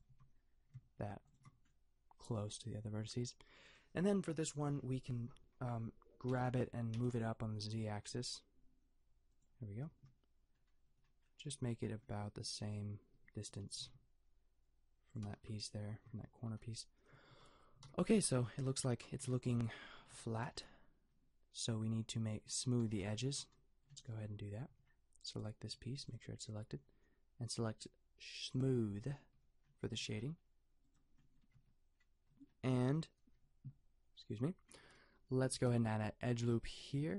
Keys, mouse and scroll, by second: 0.2 a, 1.3-6.3 drag, 6.3 g, 9.9 KP_Decimal, 13.8 g, 15.4 a, 16.2 t, 17.4 a, 17.9 t, 18.1 Tab, 24.0 t, 25.3 click, 25.7 g, 27.2-28.5 middle drag, 29.3 t, 30.0 a, 31.6 Tab, 35.7 ctrl+r.